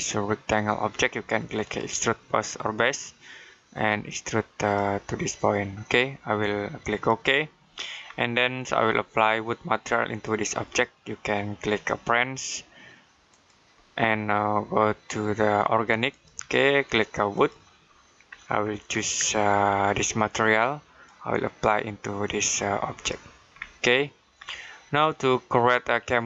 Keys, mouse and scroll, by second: 4.1 click, 7.9-10.0 scroll down 1, 10.0 click, 13.1 click, 14.1-15.9 scroll down 1, 15.9 click, 18.4 scroll down 1, 20.9 click, 23.4-24.2 scroll down 1, 24.2-26.2 scroll up 1.